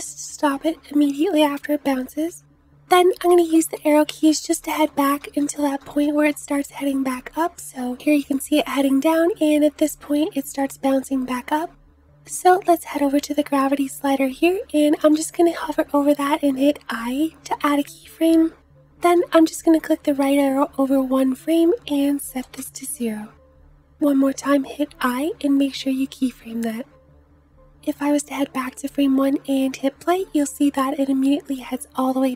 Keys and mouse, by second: 3.3 Left, 3.5 Left, 3.7 Left, 3.9 Left, 4.1 Left, 4.2 Left, 4.5 Left, 4.5 click, 4.7 Left, 4.8 Left, 5.0 Left, 5.2 Left, 5.4 Left, 5.6 Left, 5.7 Left, 6.1 Left, 6.2 Left, 7.1 Left, 7.1 click, 7.7 Right, 8.3 Right, 8.9 Right, 19.3 Right, 21.6-23.9 drag, 21.6-23.9 middle drag, 21.6-23.9 right drag, 29.0 space, 31.3 space.